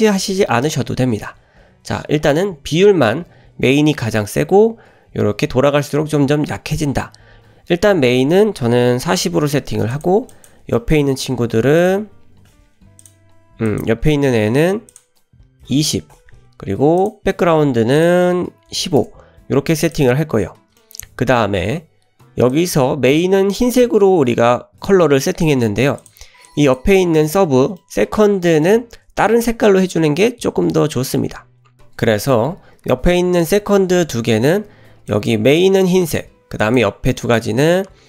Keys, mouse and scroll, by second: 1.8-3.0 scroll down 2, 3.0 scroll down 2, 10.4 drag, 10.8 shift+middle drag, 11.8-13.2 drag, 13.7 click, 14.9-16.2 drag, 17.0 click, 18.0-19.4 drag, 19.9 click, 20.8 shift+middle click, 22.5 click, 26.0 click, 26.5 click, 27.2-27.8 scroll up 3, 27.8 shift+middle click, 28.3-28.7 middle drag, 31.8-33.1 scroll down 2, 35.1 drag, 36.6 drag, 37.2 drag.